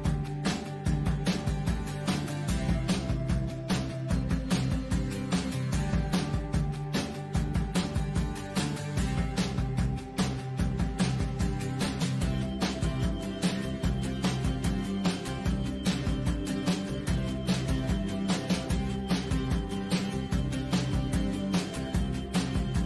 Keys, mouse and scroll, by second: 15.6-16.0 scroll down 2, 16.0 click, 16.3 click, 16.6 BackSpace, 17.4 click, 17.6 click, 18.8 scroll down 2, 19.0-19.3 scroll up 2, 19.3 scroll down 2, 20.1 click, 20.6 click, 20.8 click, 22.2 click, 22.4 scroll down 1.